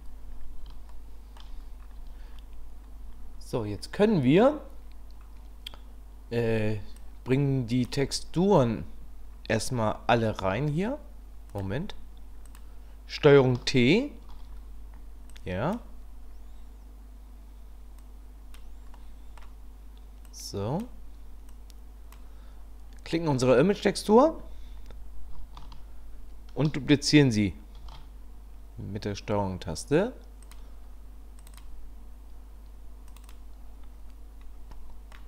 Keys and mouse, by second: 0.9-1.4 shift+drag, 7.1 click, 10.4 shift+a, 12.5 click, 14.3 ctrl+t, 15.3 click, 18.1 click, 19.0 middle click, 20.2 click, 21.5 click, 27.8 ctrl+shift+d, 34.7 middle click.